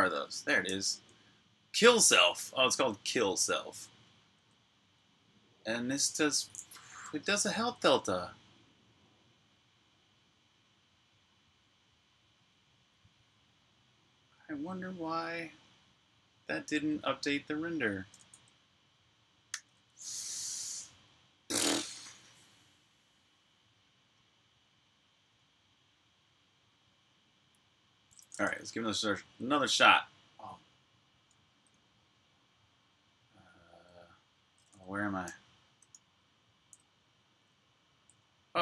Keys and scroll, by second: 0.5-2.1 typing, 1.9 Escape, 3.9-5.8 typing, 7.0-7.5 typing, 19.2 super+r, 19.7-20.6 typing, 20.6 super+h, 28.2-29.8 typing, 30.8-33.6 typing, 34.7-36.4 typing.